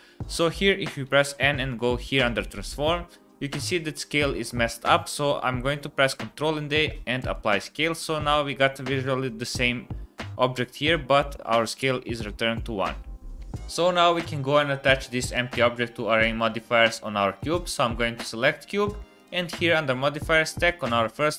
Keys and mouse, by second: 1.0 n, 6.1 ctrl+a, 19.1 click.